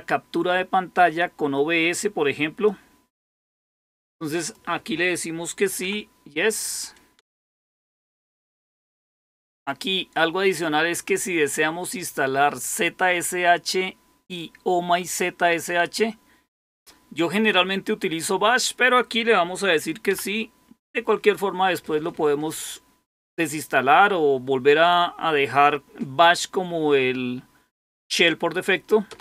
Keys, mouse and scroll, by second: 2.6 click, 4.3 click, 7.1 Return.